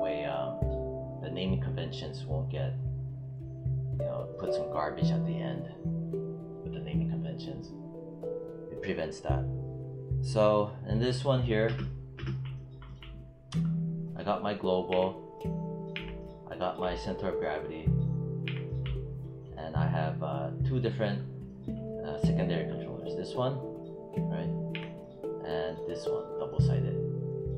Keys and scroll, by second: 11.5 space, 14.8 w, 15.8 z, 18.3 z, 24.6 z, 27.4 z.